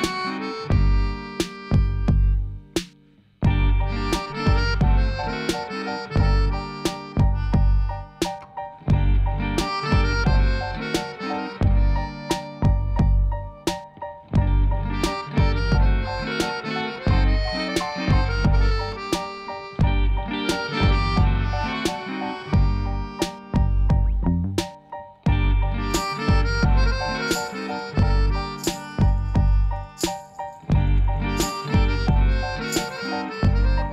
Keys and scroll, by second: 5.1 3, 5.2 Return, 17.4 alt+a.